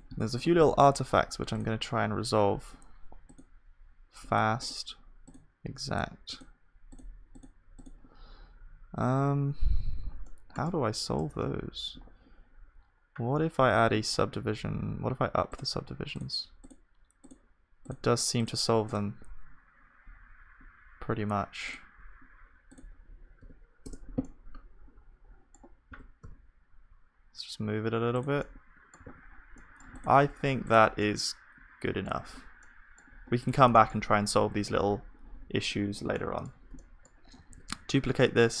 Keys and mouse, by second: 0.0 ctrl+s, 0.0-10.3 drag, 10.7 Tab, 24.2 click, 24.2 right click, 24.7-28.3 middle drag, 25.9 g, 30.0 ctrl+s, 30.0-32.7 drag, 30.0-31.9 middle drag, 30.2 right click, 32.2 middle click, 32.4 right click, 32.7-38.6 middle drag, 37.8 shift+d.